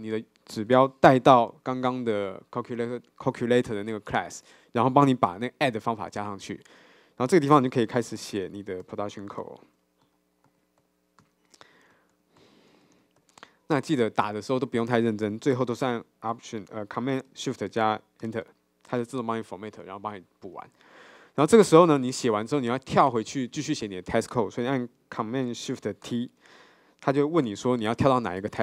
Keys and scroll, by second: 8.2 Tab, 18.4 ctrl+shift+super+Return, 26.2 ctrl+shift+super+t.